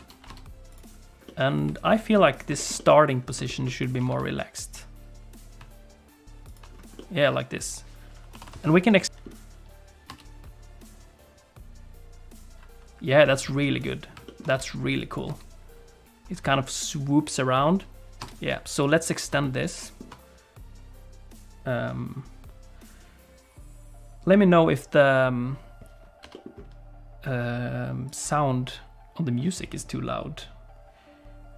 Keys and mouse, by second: 0.0 ctrl+space, 0.8 click, 1.2 middle click, 2.5 shift+click, 2.7 middle click, 3.4 shift+click, 3.6 middle click, 4.0 r, 7.1-9.4 middle drag, 9.0 i, 9.0 a, 9.0 KP_Decimal, 10.1 space, 15.0 click, 15.3 space, 18.2 space, 18.8 click, 19.5 ctrl+click, 26.2 g.